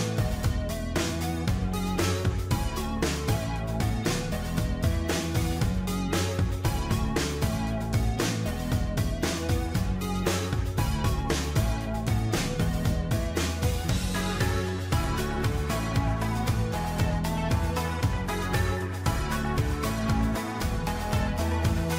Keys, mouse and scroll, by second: 3.7 ctrl+j, 6.7 ctrl+j, 9.6 ctrl+j, 12.7 ctrl+d, 12.9 ctrl+d, 16.1 ctrl+z, 16.3 ctrl+z, 19.6 ctrl+j.